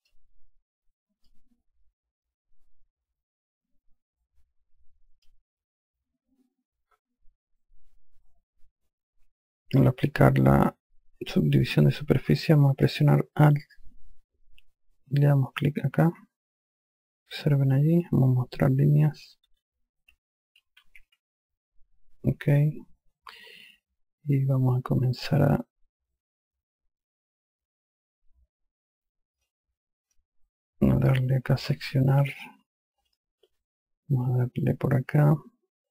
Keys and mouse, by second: 1.7 click, 10.2 click, 16.0 alt+click, 19.8 n, 21.2-21.9 typing, 29.9 click, 33.6 click.